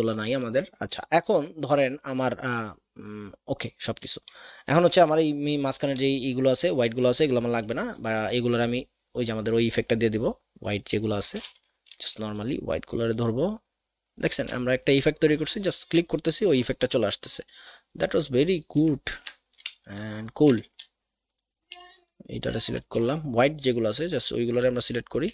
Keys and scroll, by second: 5.9 a.